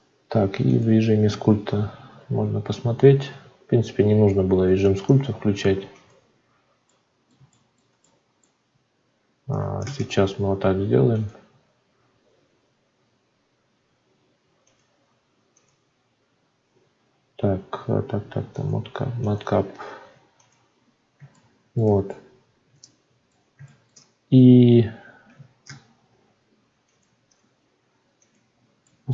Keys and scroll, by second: 9.8 ctrl+space, 25.6 alt+v.